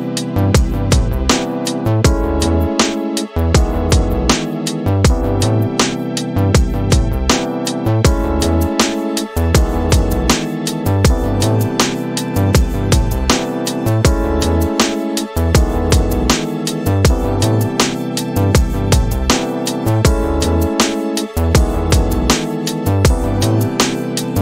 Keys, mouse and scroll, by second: 4.1 click, 6.7 click, 8.1 click, 12.1-13.6 drag, 14.7-17.1 drag, 19.9 shift+Left, 21.7 space.